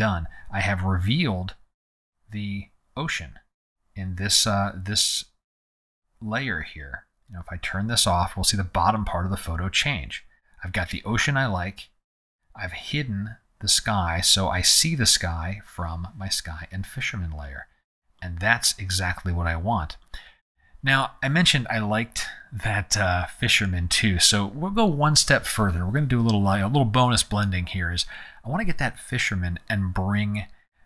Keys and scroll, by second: 5.8 z.